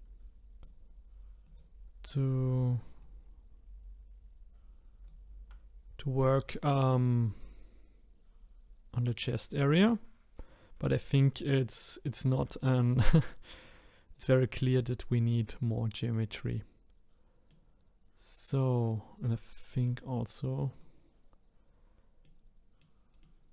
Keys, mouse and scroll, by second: 1.4 click, 2.4 click, 3.0 click, 12.6-15.6 shift+middle drag, 17.5-19.0 middle drag, 19.2-20.5 middle drag, 20.7 click, 22.2 middle click, 22.8 middle click, 23.4 middle click.